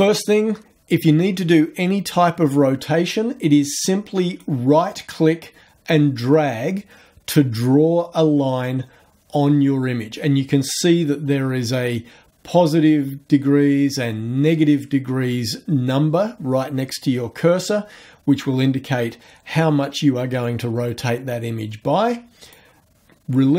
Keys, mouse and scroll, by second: 4.4-22.8 right drag.